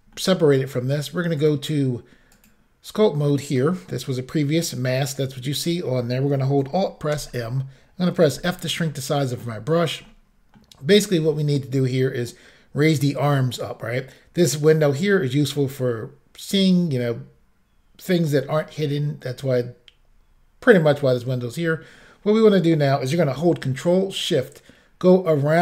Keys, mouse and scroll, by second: 0.2 middle click, 0.3 scroll up 1, 1.4 click, 2.4 click, 7.2 alt+m, 8.4 f, 9.3 click, 10.1 middle click, 12.4-12.7 scroll down 1, 22.4 middle click, 24.2 ctrl+click.